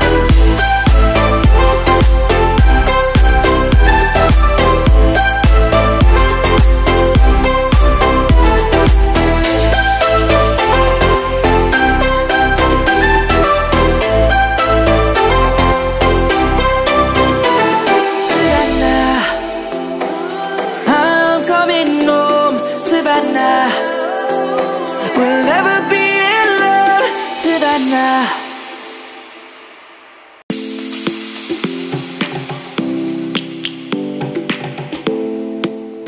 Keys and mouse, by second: 1.3 click, 3.5 s, 7.2 click, 8.8 click, 10.3 middle click, 12.3 Tab, 12.8 middle click, 13.7 Tab, 14.2 click, 14.3 right click, 14.9 click, 15.4 Tab, 15.9 middle click, 16.5 click, 17.1 middle click, 18.9 i, 20.5 click, 21.4 shift+middle click, 23.0 e, 25.1 click, 25.5 middle click, 27.9 click, 33.6 click, 34.8 i, 35.6 click.